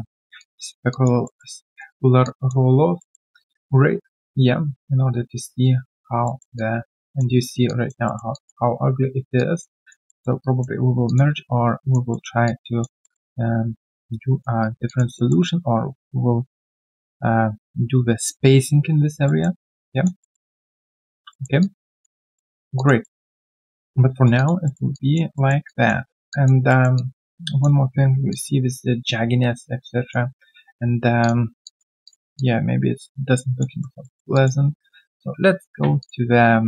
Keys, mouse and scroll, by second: 0.3 alt+click, 0.6 alt+right click, 0.9 alt+click, 1.2 alt+middle click, 1.6 alt+click, 3.0 alt+middle click, 3.3 alt+click, 6.2 alt+middle click, 6.5 alt+click, 7.3 alt+right click, 7.6 alt+click, 8.0 alt+middle click, 8.3 alt+click, 9.2 alt+click, 10.0 alt+middle click, 10.4 alt+click, 11.0 alt+click, 12.1 alt+middle click, 12.4 alt+click, 13.0 alt+middle click, 13.3 alt+click, 14.6 alt+right click, 14.8 alt+click, 15.1 alt+middle click, 19.2 alt+middle click, 19.6 alt+click, 20.2 alt+middle click, 20.5 alt+click, 20.8 alt+right click, 21.3 alt+middle click, 21.6 alt+click, 22.2 alt+middle click, 22.4-22.7 alt+scroll down 1, 22.7 alt+click, 23.0 alt+middle click, 23.3 alt+click, 24.1 alt+right click, 24.3 alt+click, 24.6 alt+middle click, 24.9 alt+click, 25.3 alt+middle click, 25.6 alt+click, 26.3 alt+click, 26.7 alt+middle click, 26.9 alt+click, 28.1 alt+click, 28.3 alt+click, 31.6 alt+click, 33.7 alt+right click, 34.0 alt+middle click, 34.3 alt+click.